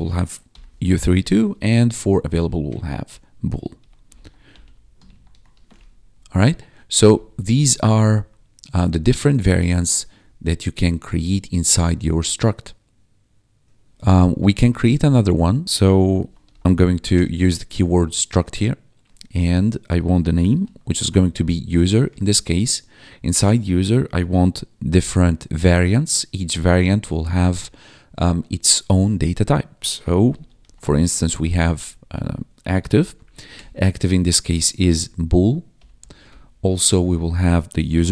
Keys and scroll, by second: 0.2-1.3 typing, 1.4 Escape, 1.9 Down, 2.1 Right, 3.5-5.2 typing, 5.5 ctrl+s, 5.7 Escape, 6.2 `, 7.0 BackSpace, 7.3 ctrl+s, 7.7 Down, 8.1 ctrl+s, 11.2 1, 14.4 Return, 15.6 ctrl+4, 15.9-17.4 typing, 20.2-21.7 typing, 22.0 Return, 29.5-35.9 typing, 36.2 Return, 37.6-38.1 typing.